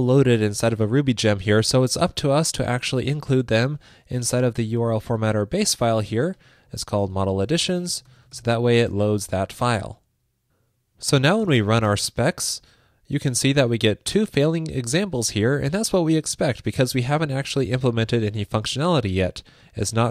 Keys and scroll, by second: 5.0 ctrl+shift+d, 8.9 super+Right, 9.4 super+s.